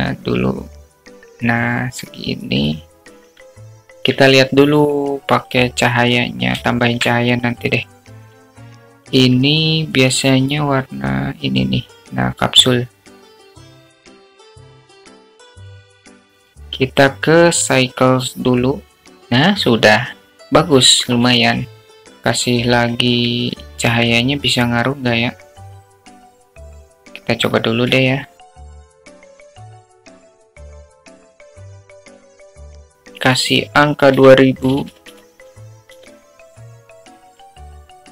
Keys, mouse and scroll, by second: 0.5-2.0 drag, 2.6-4.7 drag, 5.6-6.1 alt+middle drag, 7.4 click, 8.7-9.1 shift+middle drag, 11.4 click, 12.0 click, 15.6 click, 15.9 KP_0, 18.4 click, 18.9 click, 23.7 click, 25.5 shift+a, 28.9 alt+middle click, 29.2 click, 29.4 alt+middle click, 29.6 alt+middle click, 30.1 alt+middle click, 30.4 click, 30.8 click, 31.1 middle click, 31.8 KP_0, 32.3 click, 34.2 click, 35.3-38.1 drag, 36.9 0.